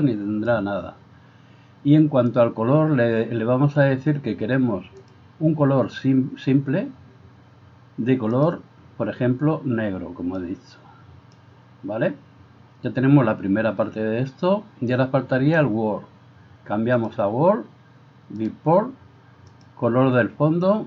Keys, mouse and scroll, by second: 5.0 click, 8.4 click, 17.0 click, 18.4-19.7 drag.